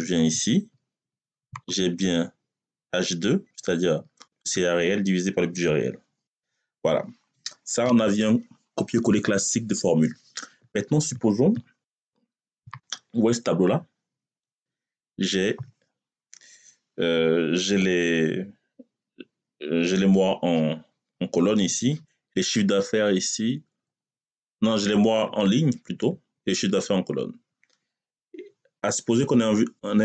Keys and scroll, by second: 6.1 Return.